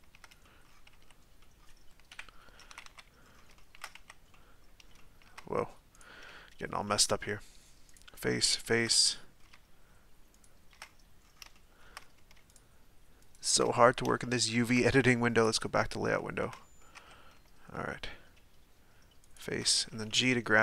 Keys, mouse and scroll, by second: 0.4-1.1 middle drag, 1.1 z, 1.4 middle click, 2.1 KP_1, 2.7 a, 2.8 a, 3.2-3.5 scroll up 1, 3.5 shift+middle click, 4.1 z, 4.3-5.9 middle drag, 5.9 right click, 6.3-7.9 shift+middle drag, 7.9 shift+right click, 8.2-10.3 shift+middle drag, 10.3 shift+right click, 10.8-11.5 scroll up 7, 11.5 shift+middle click, 12.5 shift+right click, 13.2 shift+right click, 13.6-15.4 middle drag, 15.4 click, 16.2-17.0 shift+middle drag, 17.0 Tab, 17.9-19.3 middle drag, 19.3 shift+right click, 19.9 g.